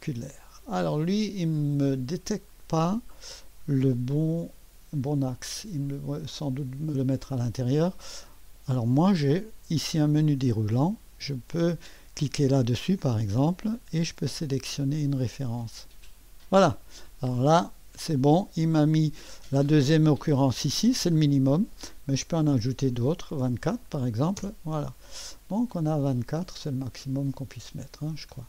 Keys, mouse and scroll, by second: 1.9-3.6 drag, 4.6 2, 5.4 click, 6.8 typing, 7.3 click, 10.1 click, 13.5 click, 15.8-17.0 drag, 20.9-22.4 drag, 22.2-22.9 typing, 24.4-26.6 Return, 25.5-26.2 scroll up 1, 26.2-26.6 scroll down 2, 26.4-28.0 typing, 26.6-28.4 drag.